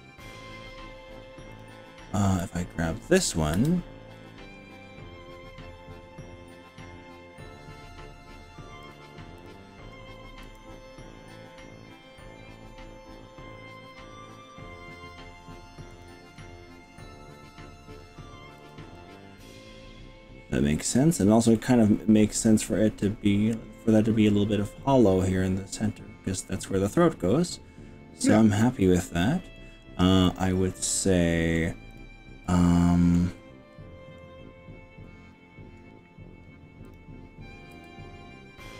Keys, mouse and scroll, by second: 1.5 click, 2.5 click, 3.6 g, 3.9 scroll up 1, 4.2-4.9 scroll down 5, 5.9-6.7 scroll down 3, 7.1 scroll down 1, 8.9 click, 9.5 click, 10.5 g, 15.9 click, 16.4-18.1 middle drag, 18.7 click, 19.0-21.3 middle drag, 21.7-23.1 middle drag, 24.9-28.3 middle drag, 28.6 middle click, 30.3-31.7 middle drag, 31.9 click, 32.4 middle click, 33.4 scroll up 2, 36.9 click, 37.7 g.